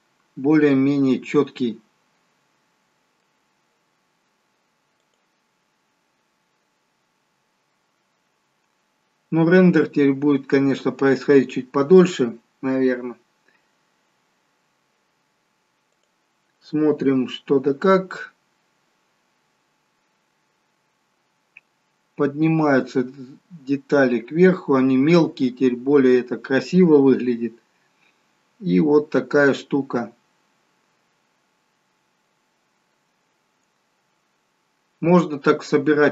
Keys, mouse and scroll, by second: 0.5 middle click, 5.7 click, 19.1 click, 22.5 scroll down 2, 23.8 scroll down 1.